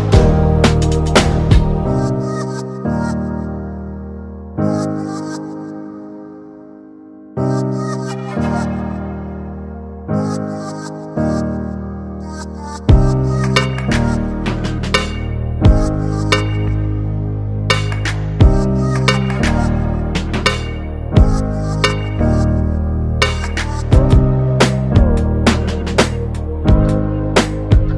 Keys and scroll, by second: 24.3 BackSpace.